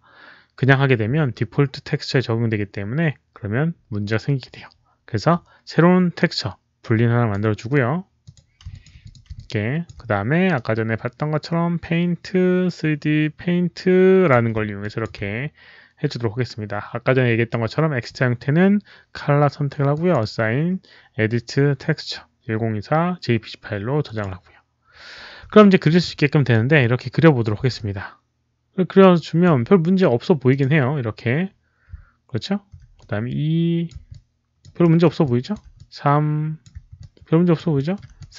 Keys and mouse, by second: 3.2 alt+click, 3.2 w, 7.1 w, 8.1 click, 8.6 alt+click, 8.9 alt+click, 9.3 alt+click, 10.4-14.2 right drag, 10.4 alt+click, 13.1 alt+click, 14.7 alt+click, 14.9 right click, 19.0 alt+click, 19.0 right click, 19.8 alt+click, 23.9 alt+click, 25.5 alt+middle click, 25.9 alt+click, 26.7 alt+click, 27.7-29.3 alt+drag, 30.4 alt+click, 32.9 alt+click, 34.0 alt+click, 34.7 alt+middle click, 35.1 alt+click, 35.7 click, 36.5 alt+middle click, 36.9 alt+click, 36.9 alt+middle click, 37.8 alt+middle click, 38.1 alt+click.